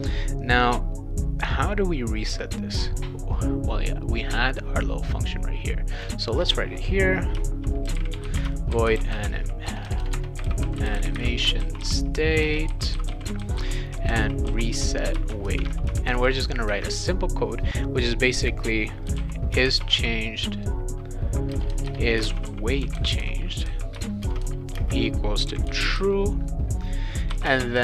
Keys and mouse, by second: 5.9 click, 7.6-16.1 typing, 18.8-20.4 typing, 21.5-27.5 typing, 23.9 Return.